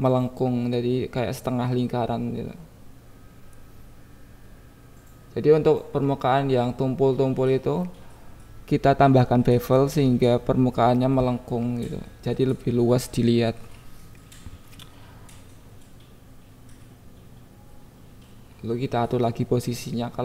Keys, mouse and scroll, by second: 0.1 click, 1.2 KP_7, 1.9 click, 2.2 click, 2.7 Tab, 2.9 Tab, 3.5 Tab, 4.1 g, 4.5 Up, 4.6 Up, 5.3 Down, 5.9 click, 6.4-7.7 shift+drag, 8.2 click, 8.4 KP_1, 8.9-9.9 shift+drag, 10.2 click, 10.3 KP_1, 10.9 click, 11.4-15.3 right drag, 15.3 Tab, 15.9 click, 16.4 alt+z, 16.5 click, 17.6 g, 18.3 Up, 18.3 click, 18.7 click, 19.3 g, 19.3-19.9 Down, 19.9 click, 20.0 Tab.